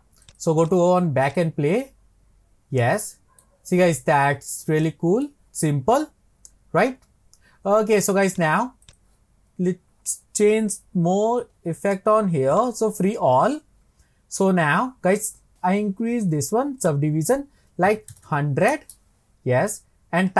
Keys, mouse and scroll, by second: 0.2-3.0 drag, 3.0-4.2 middle drag, 4.2-4.6 scroll down 1, 4.9-8.2 middle drag, 8.3-10.0 drag, 10.0-11.2 scroll up 18, 11.2-12.5 scroll down 23, 12.5-13.4 drag, 13.4-15.5 scroll up 23, 16.8-18.3 drag, 18.3 KP_0.